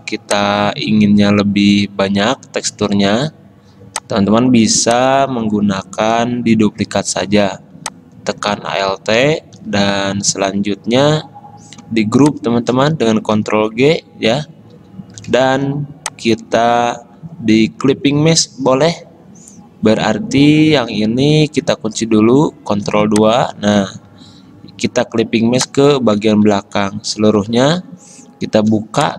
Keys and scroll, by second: 13.6 ctrl+g, 16.7 ctrl+z, 22.9 ctrl+2, 24.1 ctrl+z, 26.4 ctrl+z, 27.5 ctrl+alt+2.